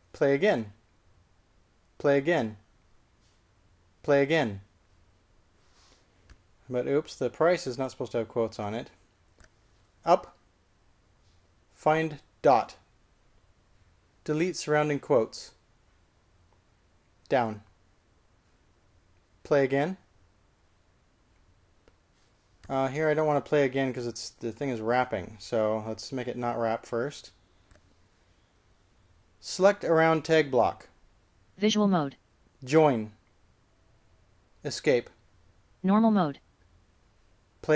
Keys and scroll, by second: 1.3-2.0 typing, 11.2 k, 13.6 typing, 16.1-16.9 typing, 18.4 j, 20.9 typing, 31.4-32.1 typing, 34.0 shift+j, 35.8 Escape.